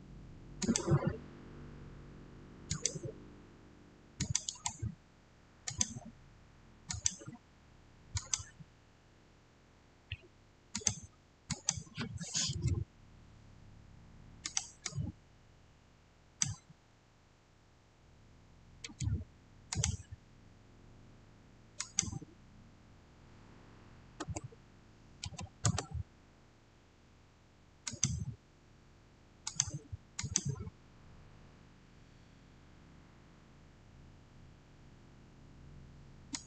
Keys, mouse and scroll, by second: 2.6 click, 4.3 right click, 5.6 click, 10.6 click, 14.3 click, 14.3-18.5 drag, 19.6 click, 21.7 click, 24.1 3, 25.1 0, 25.5 Return, 27.7 Return, 27.8 click, 36.2 click.